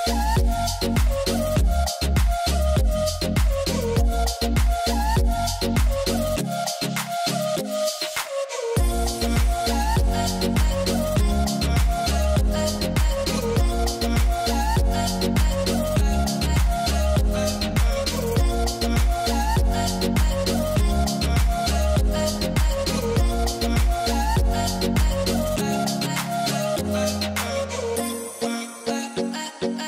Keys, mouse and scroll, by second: 7.7-9.3 drag, 22.2-23.7 drag.